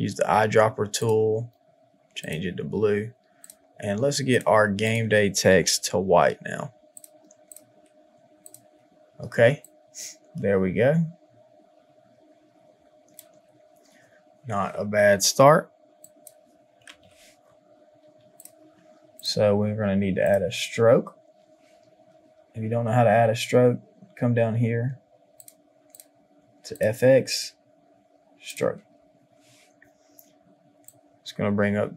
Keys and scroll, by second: 9.3 space, 16.8 KP_5, 17.0 Return.